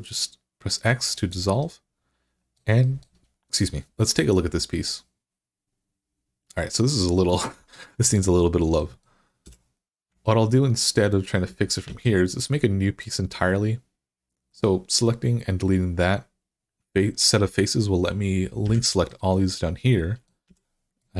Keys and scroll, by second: 9.3 3, 11.7 x, 18.5 i, 20.3 x.